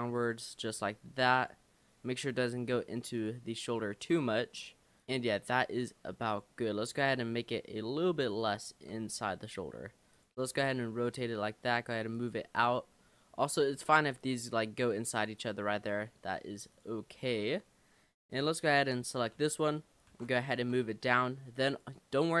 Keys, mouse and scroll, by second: 0.7 r, 2.2 middle click, 3.2 click, 3.9 middle click, 4.0 Tab, 4.2 scroll down 3, 4.4-5.0 middle drag, 5.0 click, 5.2-5.8 scroll up 3, 5.8 Tab, 6.3 click, 7.0 l, 8.9 l, 9.6 r, 10.5 g, 12.6 click, 13.0 middle click, 13.5-14.0 scroll up 5, 14.2 click, 14.8 click, 15.2 click, 15.4 click, 15.9 click, 16.7 click, 17.1-18.0 scroll down 9, 19.4 l, 20.1 shift+d, 20.6 r, 22.2 middle click.